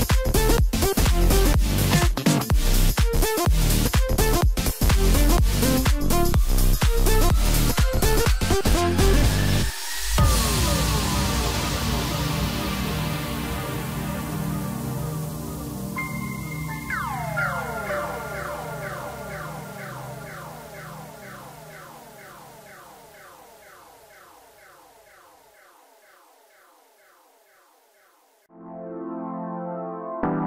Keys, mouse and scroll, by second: 0.0 ctrl+KP_4, 0.1 ctrl+KP_4, 0.8 scroll up 1, 1.4-2.7 scroll down 2, 2.7 ctrl+r, 14.8-15.8 scroll up 2, 15.8 ctrl+b, 19.4 scroll down 3, 19.7-22.0 middle drag, 22.0 KP_1, 23.8-24.6 scroll up 2, 24.6-24.9 scroll down 3, 24.9-26.5 middle drag, 26.5-26.8 scroll up 3, 26.8-29.2 middle drag, 29.2 Tab, 29.6 scroll down 2, 30.0-30.4 middle drag.